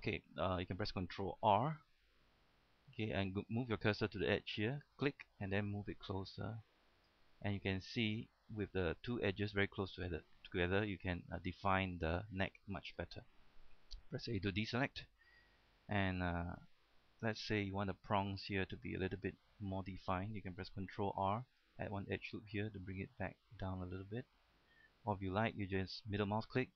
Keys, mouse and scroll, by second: 0.3 shift+middle click, 0.7 scroll up 1, 0.8 middle click, 1.8 ctrl+r, 5.2 click, 7.6 middle click, 8.1-8.5 scroll up 1, 8.5 middle click, 13.0 scroll down 1, 13.3 middle click, 14.3 typing, 14.5 scroll down 1, 15.2 middle click, 16.2-16.5 scroll up 1, 16.6 shift+middle click, 17.3-17.6 scroll up 1, 17.6 shift+middle click, 17.9 scroll up 1, 18.1 middle click, 18.4 scroll down 1, 18.7 shift+middle click, 21.1 ctrl+r, 21.7 click, 26.4 middle click.